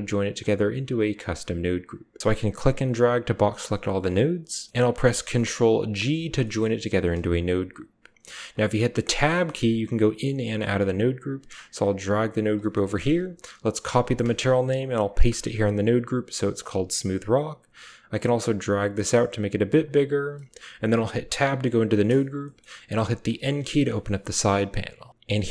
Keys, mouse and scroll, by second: 0.2 click, 2.4-3.8 drag, 4.5 click, 4.5 typing, 5.9 ctrl+g, 8.0 click, 8.9 Tab, 10.0 Tab, 10.2 Tab, 10.3 click, 11.4 click, 12.2 typing, 12.6 click, 13.6 ctrl+click, 13.9-14.7 typing, 14.6 click, 16.5 click, 17.6-19.5 drag, 19.9 click, 20.2-23.1 typing, 22.4 drag.